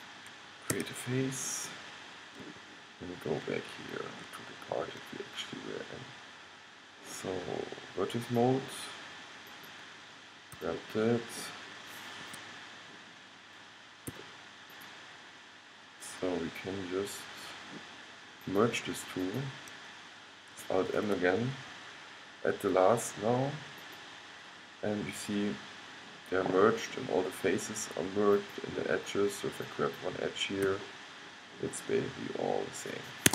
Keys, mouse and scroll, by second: 0.8 f, 2.1-3.5 middle drag, 3.9-5.8 middle drag, 6.4-7.7 middle drag, 8.4-11.4 drag, 10.7 g, 11.4 middle click, 14.3 g, 14.9-16.7 drag, 18.6-21.1 drag, 21.1 alt+m, 28.5-31.6 drag, 30.8 g.